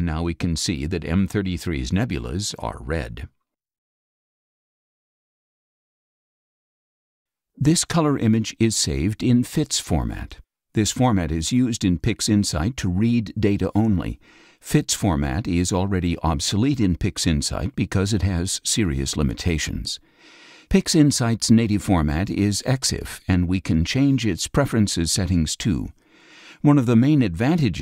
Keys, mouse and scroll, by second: 0.5-0.9 scroll down 4, 0.7 middle click, 1.4 click, 1.4 space, 2.0 scroll down 2, 16.0 click, 21.0 click, 24.5 click, 24.7-25.5 scroll up 1.